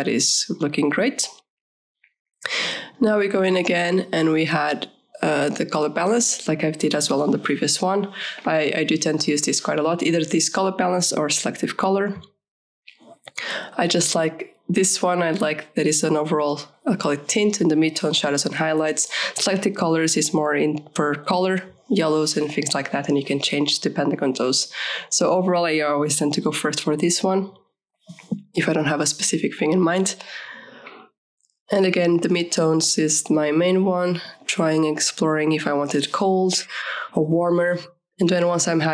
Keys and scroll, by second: 18.5 KP_2, 18.8 KP_5, 18.9 Delete.